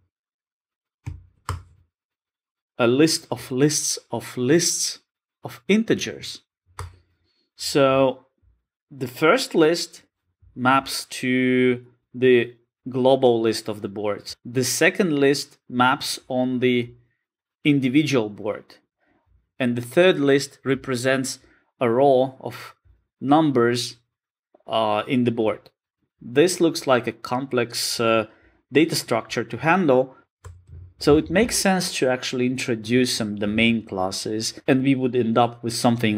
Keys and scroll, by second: 6.9 Return.